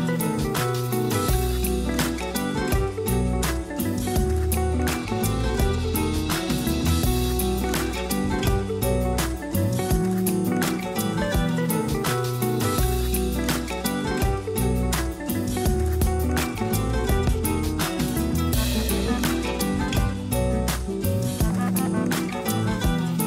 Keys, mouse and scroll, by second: 1.6-2.7 drag, 2.7-3.1 scroll down 3, 3.1 middle click, 3.9 r, 5.9-6.4 scroll down 4, 6.4 a, 6.6 a, 7.1 KP_0, 7.6 Tab, 7.9-8.3 scroll down 1, 8.3 a, 8.5 a, 9.1-9.6 shift+middle drag, 9.6-10.6 scroll up 3, 10.6-11.0 scroll down 2, 11.0-11.4 shift+middle drag, 11.4-12.9 scroll up 2, 13.2 click, 13.9 Tab, 15.1 Tab, 15.4 click, 16.1 Tab, 16.4 scroll up 1, 18.2 click, 18.4 click, 19.4 ctrl+KP_Add, 20.5 r, 22.1 g.